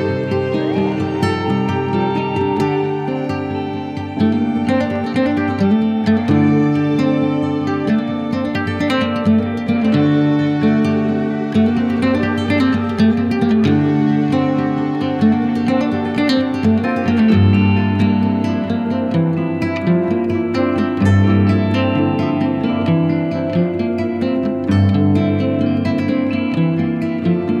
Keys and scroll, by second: 0.5 ctrl+Page_Down, 2.9 F4, 3.5 Escape, 11.8 shift+F2, 12.4 Escape, 24.7 2, 25.0 Return, 26.5 shift+F2, 27.3 Escape.